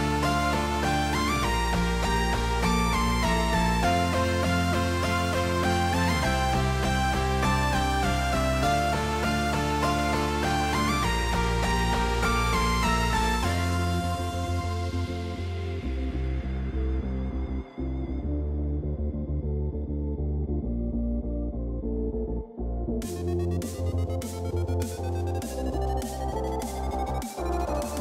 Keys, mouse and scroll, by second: 0.7-1.2 middle drag, 2.5 middle drag, 3.2 click, 3.8-4.4 middle drag, 5.1-6.1 drag, 6.6-8.7 drag, 9.4 middle click, 10.2 click, 11.6 click, 13.3 middle click, 13.9 click, 15.7-16.4 drag, 17.4 middle click, 17.9 KP_0, 25.3 click.